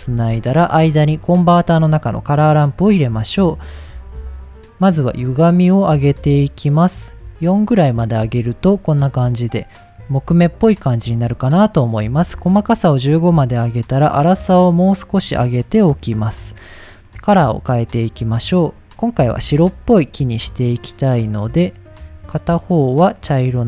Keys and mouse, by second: 0.1 shift+a, 3.1 click, 4.2 click, 4.9-6.8 drag, 7.4 middle click, 8.3 shift+middle click, 11.1 middle click, 11.8 click, 12.7-15.8 drag, 17.4 click, 22.8 click, 23.5-23.6 drag.